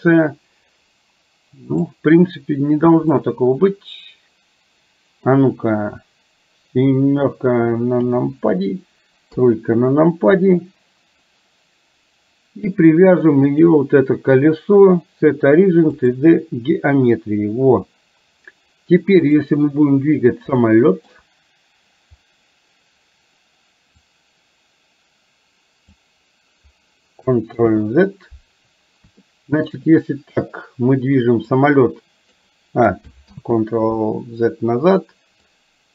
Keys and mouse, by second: 1.8 click, 3.3-5.3 middle drag, 8.0 KP_7, 9.4 KP_3, 13.6-16.3 drag, 20.7 shift+middle click, 24.2-26.1 drag, 27.7 ctrl+z, 29.3 middle click, 31.7 click, 33.4 ctrl+z, 35.5 click, 35.8-35.9 drag.